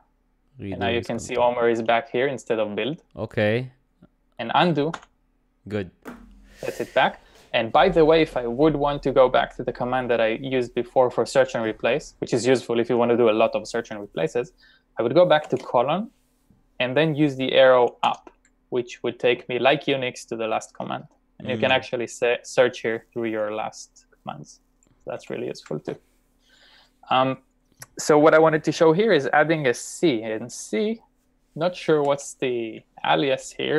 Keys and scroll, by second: 1.8 typing, 5.0 u, 15.5 shift+;, 18.1 Up, 21.6 Up, 22.2 Up, 22.4 Up, 32.1 c.